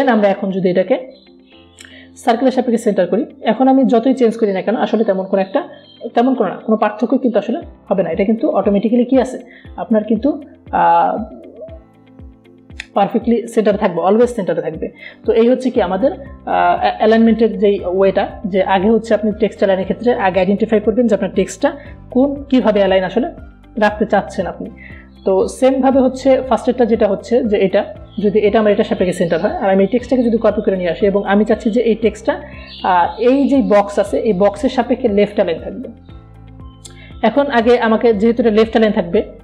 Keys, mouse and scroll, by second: 1.1-3.1 drag, 6.3 ctrl+a, 7.0-9.8 typing, 10.7 click, 19.4 click, 26.3 click, 31.6-34.5 alt+drag.